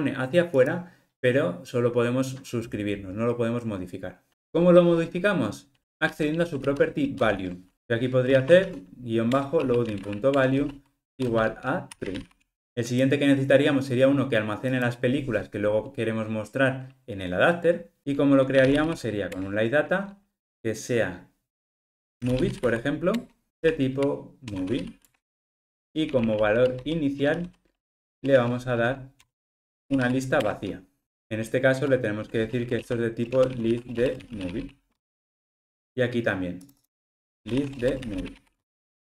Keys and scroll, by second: 9.4 Return, 18.0 super+z, 19.3 super+z, 25.1 Return, 27.2 alt+shift+Right, 30.5 Return.